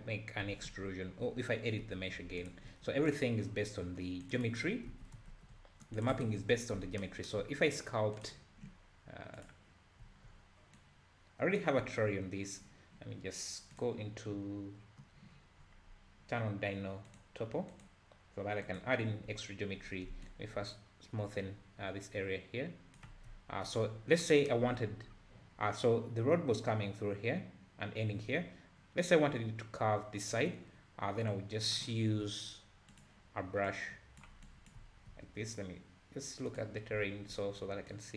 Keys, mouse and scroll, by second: 0.5 e, 2.8 ctrl+r, 4.9 alt+a, 5.3 ctrl+r, 6.4 a, 6.6-7.0 scroll down 2, 8.1-10.0 drag, 10.0 `, 10.8-11.8 drag, 11.8 `, 13.7 click, 15.3-16.2 scroll down 14, 17.1-19.3 drag, 19.3 `, 20.3-23.3 shift+drag, 23.3 `, 24.0 scroll down 1, 25.1-26.4 scroll up 3, 31.3-34.8 drag, 34.8 `, 36.5 click, 37.9 click.